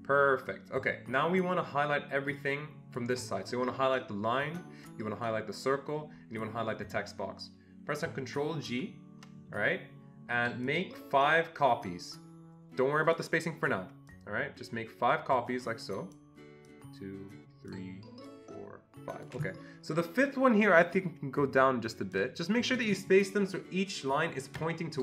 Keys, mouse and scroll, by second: 0.8-5.3 drag, 8.1-10.6 drag, 8.6 ctrl+g, 11.0-13.1 ctrl+shift+drag, 14.4-16.2 ctrl+shift+drag, 21.1-22.2 ctrl+shift+drag.